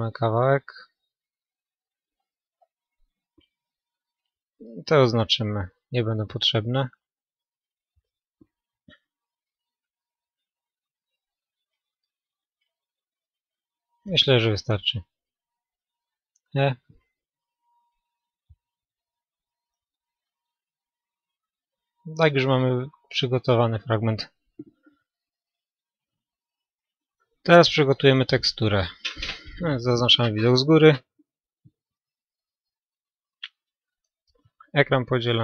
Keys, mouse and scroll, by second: 2.1-9.3 right drag, 2.3-4.1 middle drag, 5.3-6.9 middle drag, 8.0-11.1 middle drag, 10.9-12.5 right drag, 11.4-14.0 middle drag, 15.6 e, 16.8-18.7 drag, 17.2-18.9 middle drag, 20.0 a, 20.2 middle click, 21.4 middle click, 22.6-24.6 middle drag, 29.4-31.4 middle drag, 29.4-30.7 scroll up 1, 30.7-31.4 scroll up 1, 32.6-34.5 right drag.